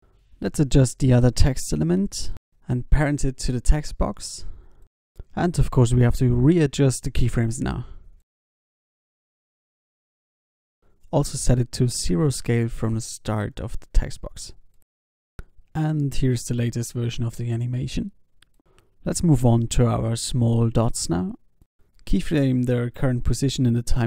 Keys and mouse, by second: 1.2 alt+a, 1.7 alt+a, 2.0 ctrl+s, 4.4 ctrl+p, 5.3 alt+a, 6.2 ctrl+s, 6.5 alt+a, 8.2 g, 8.8 s, 10.5 i, 10.5 x, 11.5 s, 12.7 i, 13.4 alt+a, 14.2 ctrl+s, 15.1 ctrl+s, 21.7 ctrl+s, 23.4 i.